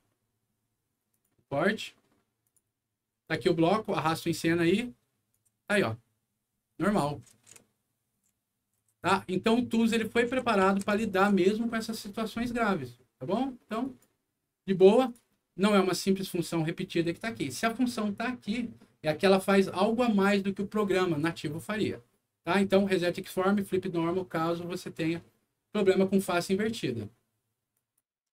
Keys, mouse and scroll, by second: 1.0 click, 2.4 click, 3.2 click, 3.8 click, 5.2-11.9 right drag, 5.4 w, 6.4-6.9 scroll up 2, 7.2 d, 8.9 s, 10.1-11.4 typing, 13.8 click, 15.0 click, 27.7 click.